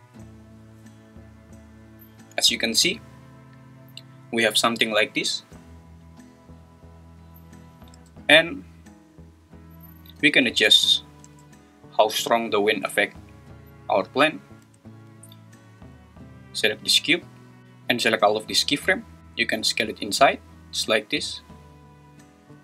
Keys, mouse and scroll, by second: 8.0 space, 11.2 space, 14.6 space, 15.7 click, 19.2 Escape, 19.2 s, 19.8 s.